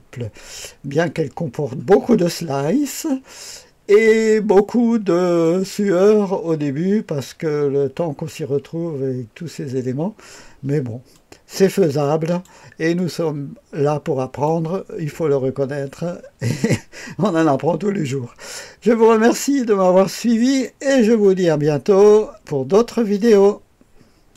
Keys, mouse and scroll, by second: 3.9 click, 5.4-8.5 drag, 11.1-12.4 drag, 12.9-14.7 drag, 19.4-20.0 scroll up 1, 20.0-21.0 right drag, 21.2 right click, 23.1 right click, 23.9 right click, 24.3 click.